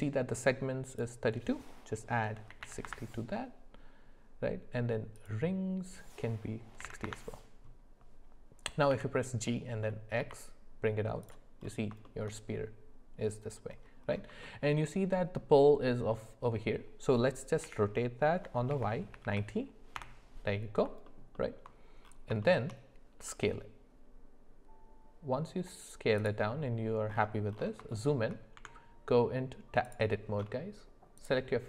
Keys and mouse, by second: 0.9-2.9 drag, 5.2-7.1 drag, 8.9 g, 12.0 shift+middle drag, 14.4 shift+middle click, 17.6 r, 21.0 alt+middle click, 21.3 alt+middle click, 22.4 shift+middle click, 27.9 shift+middle click, 28.5 Tab, 31.2 click.